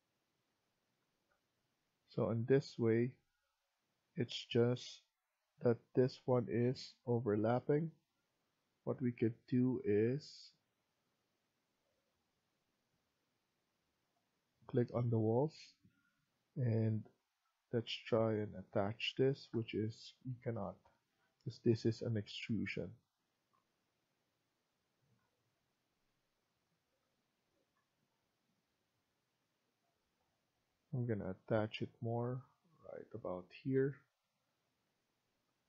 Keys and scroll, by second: 12.9 Escape, 18.9 Escape, 19.2 Escape, 33.6 Escape.